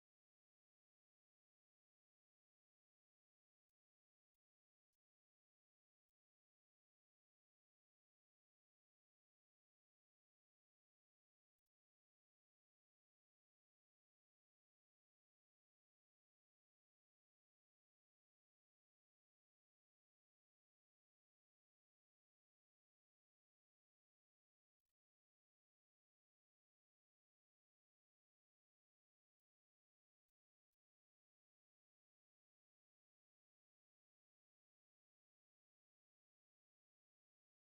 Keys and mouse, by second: 0.5 middle click, 0.8 Tab, 1.1 shift+middle click, 1.8 right click, 4.2 right click, 6.8 Tab, 7.2 Tab, 9.5 middle click, 12.1 click, 12.3 click, 15.1 click, 17.1 right click, 17.5 right click, 18.2 right click, 21.6 right click, 22.7 right click, 25.2 right click, 26.7 ctrl+click, 27.5 ctrl+click, 28.9 right click, 30.1 ctrl+click, 30.5 middle click, 31.2 shift+middle click, 32.4 ctrl+click, 33.3 shift+middle click, 34.4 right click, 36.1 ctrl+click, 37.6 ctrl+click.